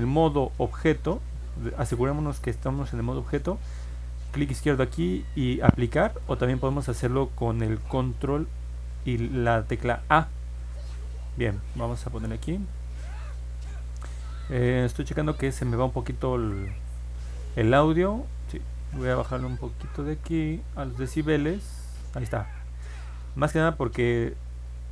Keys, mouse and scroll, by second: 0.4 ctrl+Tab, 4.2 click, 12.4 click, 19.0-22.0 drag.